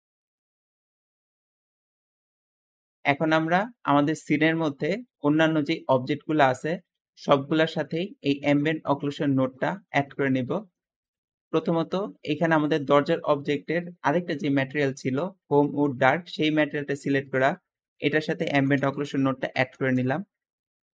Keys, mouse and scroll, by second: 0.0 `, 5.8 g, 7.6 g, 7.7 g, 12.2 g, 12.2 g, 17.4-19.3 typing, 19.8 Return.